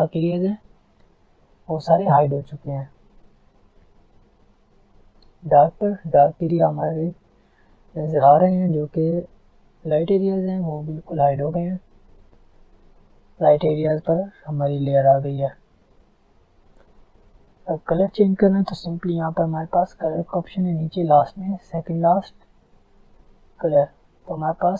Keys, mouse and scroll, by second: 3.5 click, 12.2-15.7 drag, 15.7 ctrl+z, 16.0 alt+scroll down 1, 16.5 alt+scroll up 1, 18.2 click, 20.5 typing, 23.2 click, 24.2-24.7 alt+scroll down 2.